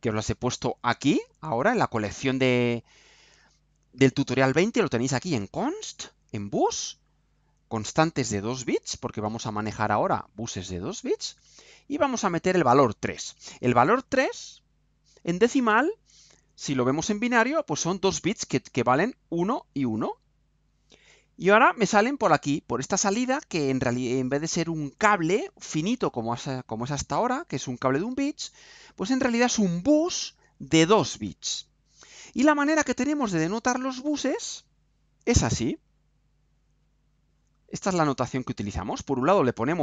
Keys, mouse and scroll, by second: 12.9 click, 14.8 click, 34.2 click, 36.1 click, 36.5-37.0 scroll down 2, 37.0-38.1 scroll down 2, 38.4 scroll down 2.